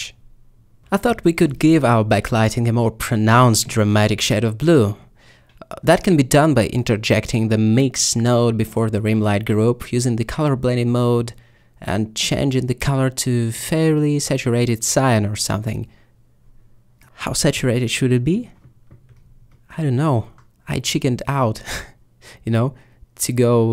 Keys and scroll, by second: 3.2 a, 7.8 g.